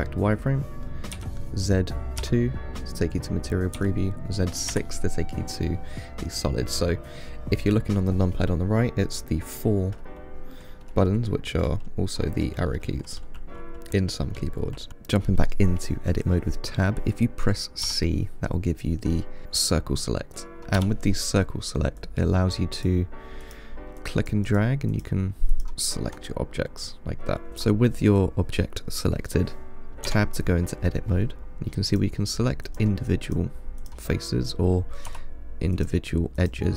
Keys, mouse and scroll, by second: 1.4 z, 18.1 c, 20.6 3, 21.0 c, 27.8 click, 30.3 Tab, 31.5 click, 32.1 click, 32.9 click, 33.5 click, 34.0 click, 35.3 2, 36.0 click, 36.6 click.